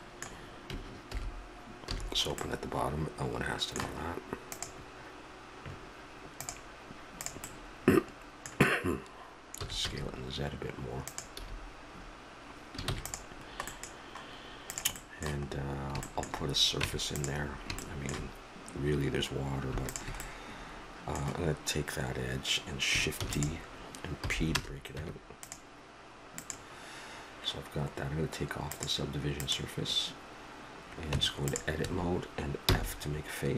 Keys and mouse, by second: 1.1 alt+h, 1.9 a, 7.2 right click, 8.0-9.0 middle drag, 9.6 s, 11.4 a, 11.9 middle click, 12.8 ctrl+s, 13.4 middle click, 14.7 right click, 15.4-16.8 middle drag, 16.8 Tab, 20.3-23.2 drag, 23.2 shift+d, 24.2 p, 25.0 Tab, 26.4-28.2 drag, 28.6 click, 31.1 Tab, 31.8 a, 32.6 f.